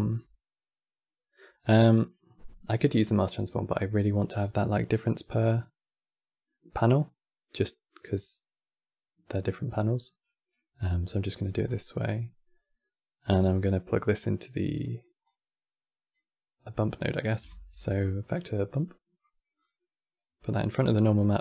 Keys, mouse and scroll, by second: 10.9-11.4 middle drag, 11.4 scroll down 5, 11.5-14.5 middle drag, 14.9 click, 16.7-17.3 middle drag, 17.3 shift+a, 20.3 click, 20.9 click.